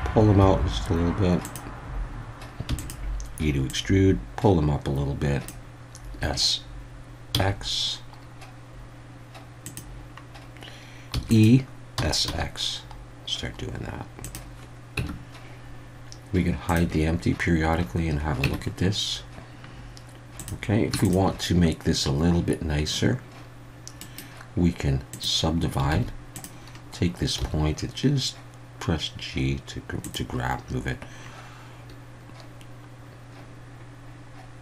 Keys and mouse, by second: 1.4 click, 2.7 e, 2.8 click, 3.7-5.5 drag, 6.2 s, 7.3 x, 9.6 click, 11.1 e, 11.3 click, 11.9 s, 12.2 x, 14.2 click, 15.0 Tab, 16.6 click, 18.4 Tab, 20.4 click, 21.0 shift+click, 24.0-25.2 right drag, 25.2 click, 25.9 alt+a, 27.4 g, 30.0 click.